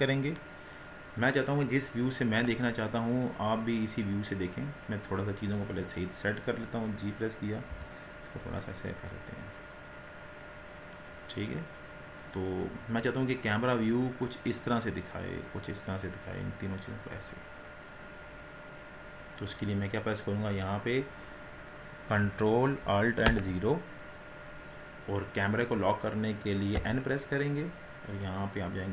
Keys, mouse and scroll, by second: 1.4-3.6 middle drag, 3.6-4.1 scroll down 2, 4.1-5.1 scroll up 4, 5.7 KP_1, 6.8 click, 7.8 g, 11.8-14.8 middle drag, 16.1-16.5 scroll up 1, 16.5-17.4 middle drag, 17.4-17.9 scroll down 4, 17.9-18.8 scroll up 4, 18.8-23.3 middle drag, 23.3 KP_0, 26.8 n.